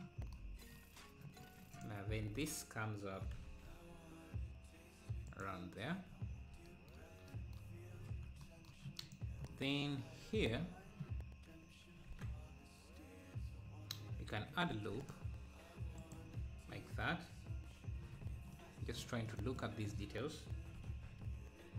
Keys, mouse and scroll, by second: 1.8 click, 3.4 g, 9.0 click, 10.3 Tab, 12.2 ctrl+s, 14.7 ctrl+r, 18.3 scroll up 3, 18.5-20.8 middle drag, 20.8 ctrl+b.